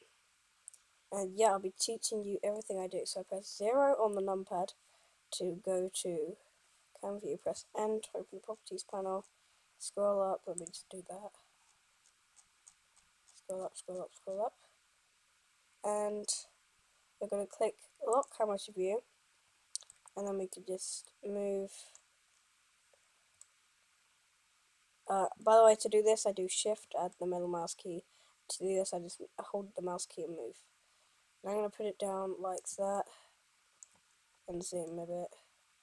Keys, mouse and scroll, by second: 2.8 KP_0, 7.6 n, 10.8-11.1 drag, 11.1-35.8 right drag.